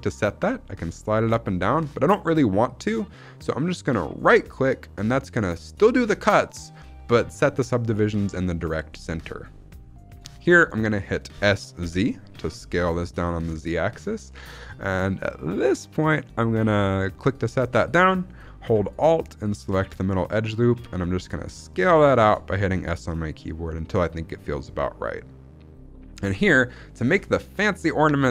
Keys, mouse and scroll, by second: 4.1-6.9 right drag, 9.7-10.1 scroll up 1, 10.2 shift+middle click, 11.2 s, 11.8 z, 17.1 click, 19.4 alt+click, 20.6-21.4 scroll down 1, 21.4 s, 26.8 click, 27.2 shift+middle click, 27.4-28.3 scroll up 1.